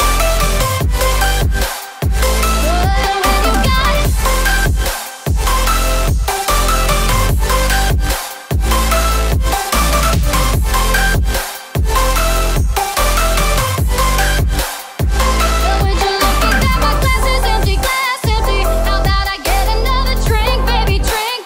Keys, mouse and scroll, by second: 0.5 scroll down 1, 2.9-5.6 alt+drag, 5.6 alt+shift+click, 6.3-6.7 scroll down 2, 6.8 click, 7.2 alt+scroll up 1, 8.2-8.9 scroll up 2, 10.8 scroll up 1, 11.0 click, 11.8 m, 13.0-17.1 drag, 17.1 Down.